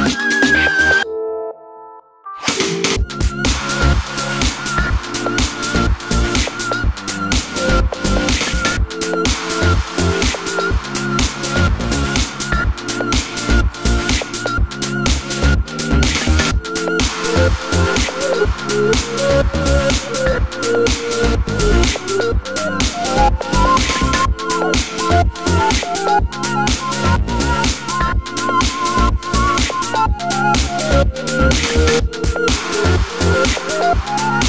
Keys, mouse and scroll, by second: 0.2 scroll down 1, 0.5-15.1 shift+middle drag, 0.8 a, 3.1 KP_7, 5.5 e, 7.0 click, 7.8 click, 9.6 KP_7, 12.7 ctrl+r, 13.7 click, 14.6 scroll up 2, 15.1 ctrl+z, 16.2 g, 17.2 click, 17.5 ctrl+r, 18.2 click, 18.4 KP_7, 19.0-20.5 scroll down 2, 20.5-22.8 scroll down 1, 22.8 middle click, 23.2 3, 23.5-24.9 drag, 25.0-28.9 middle drag, 26.0 ctrl+click, 28.9 1, 29.2 click, 29.3 z, 29.5-29.8 scroll up 1, 30.0 g, 31.0 middle click, 31.2 scroll down 1, 31.3 middle click, 31.9 3, 31.9 click, 32.3 z, 32.5-33.3 middle drag, 33.3-33.8 scroll up 2, 33.8 middle click, 33.8 i, 34.3 click.